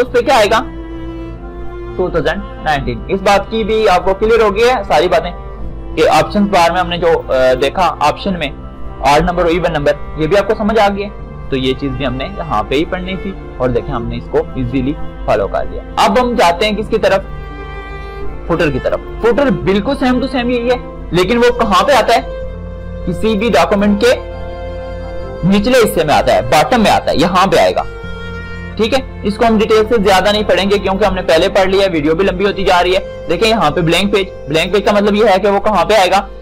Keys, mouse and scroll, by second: 0.4 click, 7.5 click, 17.5 click, 23.7-29.0 drag, 31.0 click, 34.9 click.